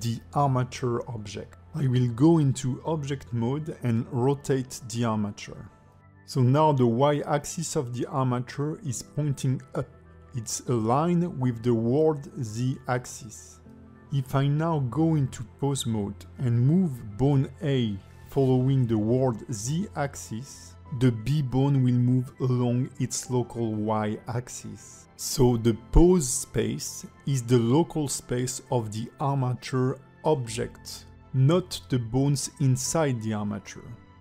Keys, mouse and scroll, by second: 0.2 click, 0.5 alt+middle click, 1.0 g, 2.4 shift+middle click, 2.7 middle click, 3.6 shift+click, 4.4 middle click, 5.0 r, 7.0 middle click, 8.0 a, 8.2 a, 8.8 click, 11.3 click, 11.9 middle click, 14.7 click, 15.3 middle click, 16.4 click, 16.9 ctrl+Tab, 17.4 click, 17.9 alt+middle click, 19.7 click, 26.7 click, 32.0 click.